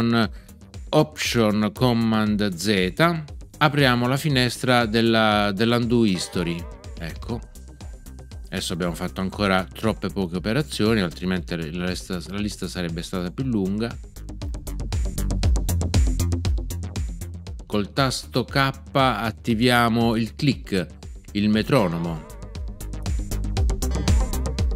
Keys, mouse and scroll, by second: 6.1 alt+super+z, 21.7 k.